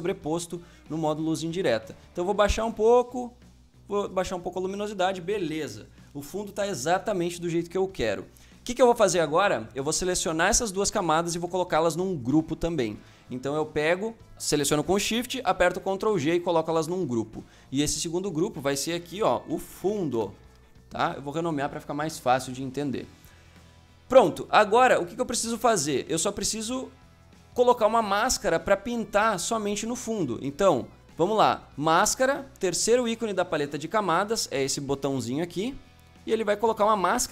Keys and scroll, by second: 15.4 ctrl+g, 16.7 Return, 19.4-20.0 typing.